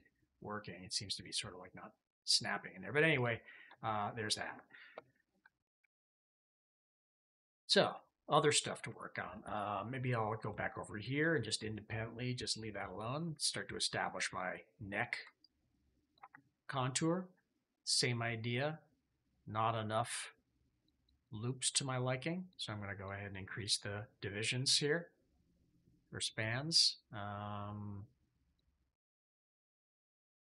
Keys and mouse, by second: 1.5-2.6 drag, 3.0 middle click, 3.6 shift+middle click, 3.9 middle click, 5.7 shift+click, 6.4 KP_3, 7.1 shift+middle click, 7.5 middle click, 7.9 shift+middle drag, 8.9 shift+click, 9.9 shift+click, 15.3 ctrl+click, 17.2-18.9 drag, 20.6 click, 20.8 click, 21.0 click, 21.5 click, 22.3 click, 22.8 click, 23.5 click, 24.2 click, 25.7 click, 26.4-27.5 drag, 28.4 click, 29.0 click, 29.6 click, 30.2 click.